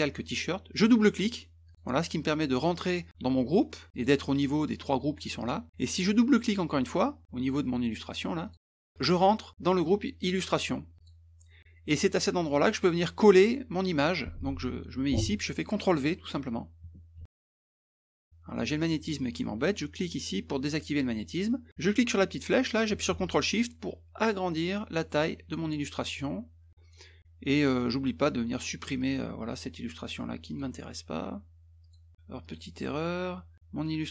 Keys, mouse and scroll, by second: 1.7 click, 3.9 click, 8.4 click, 8.5 click, 11.0 click, 17.1 ctrl+v, 18.2 click, 20.6 click, 21.8-25.5 drag, 25.9 click, 29.0 click, 30.5 click, 31.8 click, 32.4 click, 33.5 click.